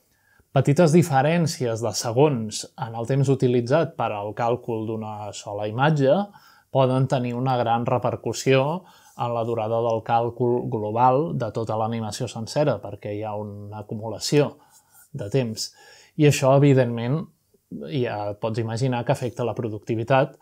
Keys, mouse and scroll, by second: 0.0-0.3 typing, 1.8 click, 2.1 middle click, 2.8 middle click, 3.2 g, 4.3 click, 6.2 click, 7.0-13.8 drag, 15.0-15.8 middle drag, 15.4-16.4 scroll up 2, 16.0 shift+middle click, 17.1-17.8 middle drag, 18.9-20.4 shift+drag.